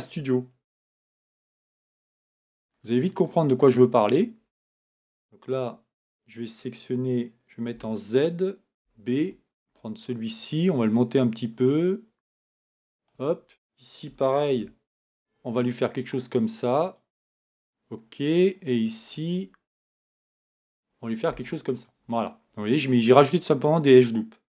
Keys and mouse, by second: 0.6 ctrl+r, 5.1 a, 7.7 z, 8.8 b, 10.7 click, 14.5 ctrl+r, 20.4 ctrl+r.